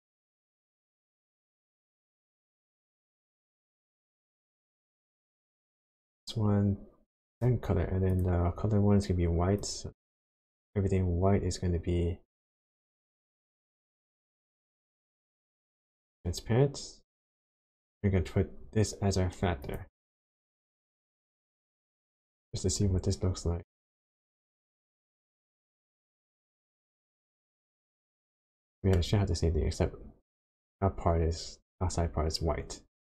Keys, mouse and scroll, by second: 5.8 click, 8.1 click, 12.8 click, 19.6 click, 22.4 ctrl+shift+click, 27.5 middle click, 28.7 middle click.